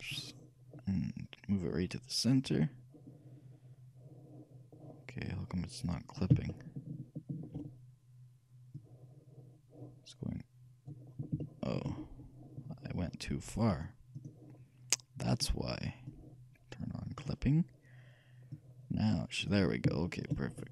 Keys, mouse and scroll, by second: 6.6-8.2 shift+middle drag, 8.9-10.7 shift+drag, 11.2 middle click, 11.5-13.3 shift+middle drag, 13.8-20.5 shift+drag, 20.1-20.7 shift+middle drag.